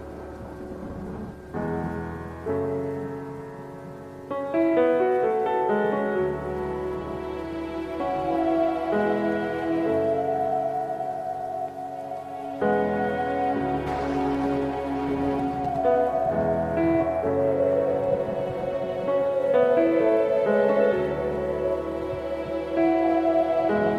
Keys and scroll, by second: 3.4 ctrl+alt+shift+e, 5.0 ctrl+shift+F7, 6.0 b.